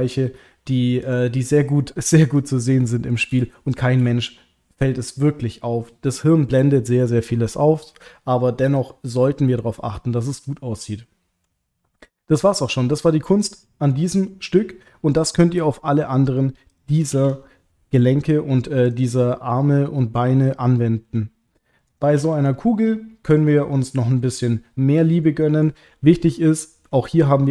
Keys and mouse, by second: 0.2 middle click, 2.3 click, 2.8 middle click, 3.7 shift+click, 11.0 middle click, 13.3 click, 13.6 middle click, 17.1 alt+h, 21.9 click, 25.3 middle click, 26.3 ctrl+middle click, 27.0-27.5 middle drag.